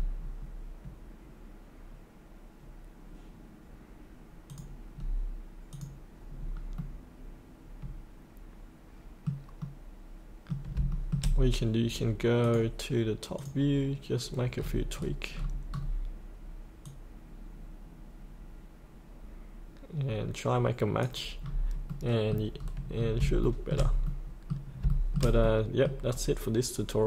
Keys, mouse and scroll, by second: 0.2-4.4 scroll up 1, 4.4 click, 5.7 click, 6.2-6.7 scroll up 1, 6.7-9.6 middle drag, 10.9 shift+middle click, 12.4 click, 14.5-16.8 scroll down 1, 16.8-21.4 drag, 21.4 scroll up 1, 21.9 middle click, 22.5-23.2 scroll up 1, 23.4 shift+middle click, 24.0-24.3 scroll up 1, 24.9 shift+middle click, 26.0 scroll down 1.